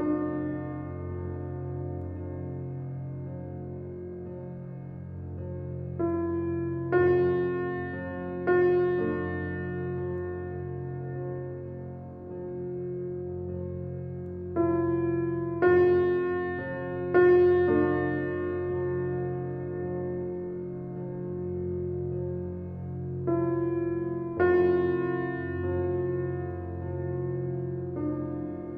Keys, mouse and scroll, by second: 0.0 Tab, 0.7-2.5 middle drag, 2.5 click, 3.7 g, 8.4 Tab, 8.8-10.8 middle drag, 10.8 click, 11.9 s, 15.5 ctrl+r, 19.7 click, 20.6 click, 21.6 d, 24.9-26.0 middle drag, 26.0 Tab, 27.2 g.